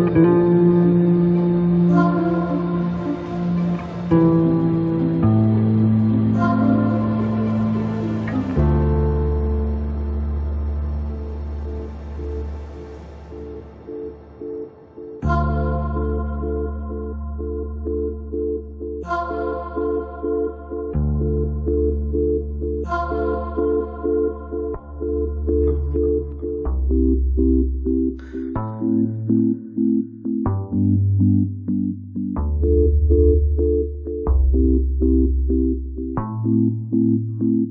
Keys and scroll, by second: 1.8 space, 6.2 space, 16.5 Return, 25.0 space, 27.4 space, 31.3 space, 36.1 space.